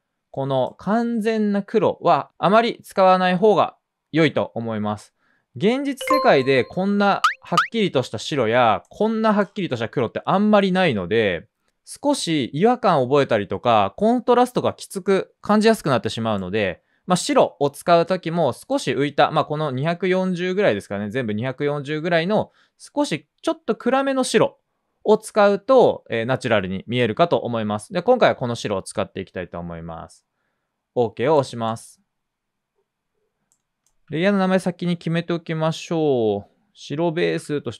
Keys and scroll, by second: 36.9-37.7 typing.